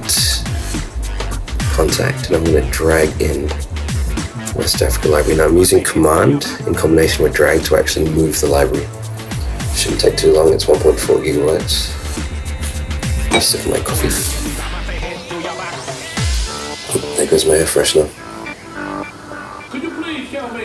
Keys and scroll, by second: 0.2 super+q.